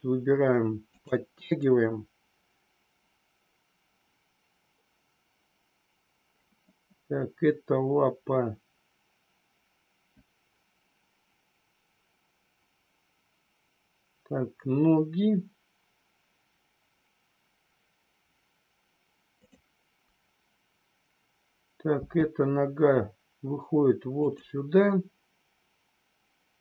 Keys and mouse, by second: 19.3-20.0 drag.